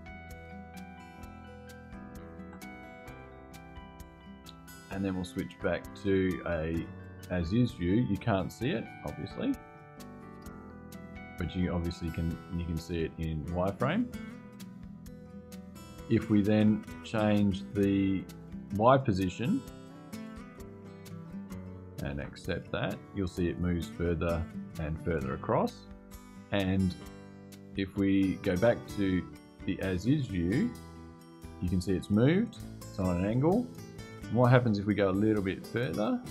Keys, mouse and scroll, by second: 1.1 scroll down 2, 2.1 Return, 5.7 click, 6.6 click, 8.3-10.1 drag, 10.8 click, 11.5 click, 12.1 click, 13.0 click, 17.8 click, 19.0-19.5 scroll down 2, 19.7-20.4 scroll down 1, 21.9 Return, 27.1 click, 29.3 click, 33.9 click, 34.8-35.3 scroll down 2, 35.5-35.9 scroll down 2.